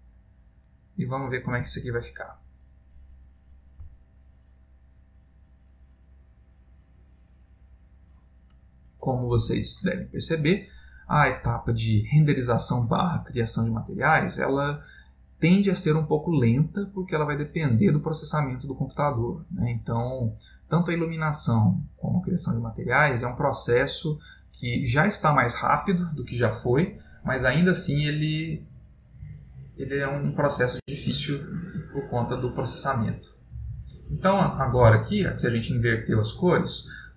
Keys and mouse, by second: 26.3 right click, 27.6 middle click, 31.3 ctrl+middle click, 32.0 middle click, 36.5 click.